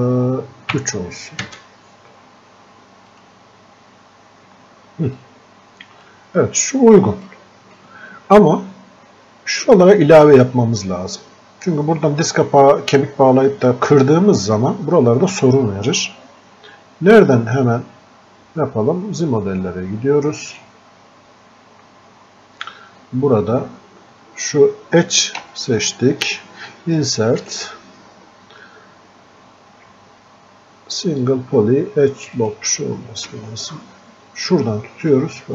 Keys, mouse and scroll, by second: 3.1 click, 6.4 scroll up 1, 7.3-14.3 drag, 14.3 scroll down 1, 20.6 click, 25.4 space, 31.7 space, 33.3 space, 35.2-35.5 drag.